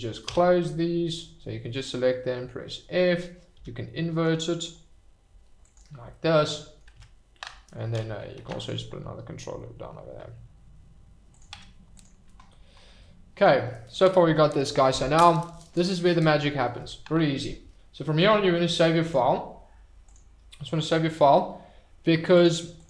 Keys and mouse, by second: 1.2 f, 5.6 click, 6.1 click, 6.9 Tab, 8.3 ctrl+r, 11.3 click, 11.5 Tab, 13.0-13.4 middle drag, 19.1-20.2 drag.